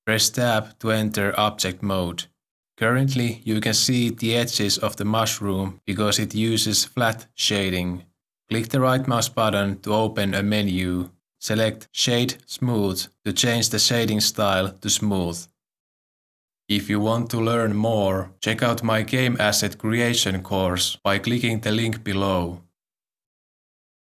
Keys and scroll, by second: 0.3 s, 0.7 Tab.